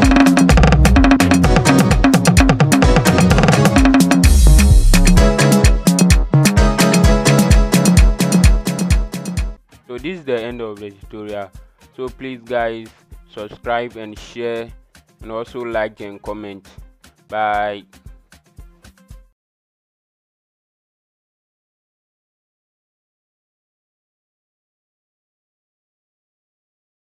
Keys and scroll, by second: 0.0-0.4 typing, 2.0-3.6 typing.